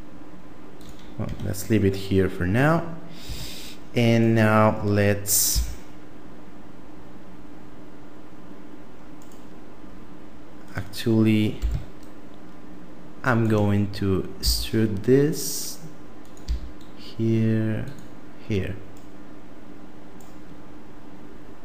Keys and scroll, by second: 1.3 Tab, 3.2 Tab, 5.5 s, 11.6 g, 14.4 e, 16.4 e.